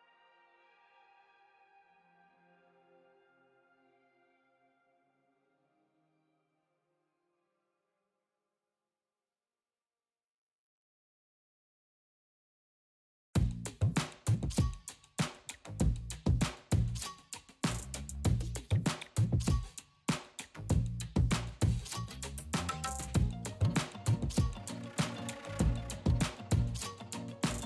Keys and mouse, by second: 0.4 click, 2.3 ctrl+l, 3.5 click, 4.0-4.6 middle drag, 5.4-7.0 middle drag, 9.7 middle drag, 10.1 click.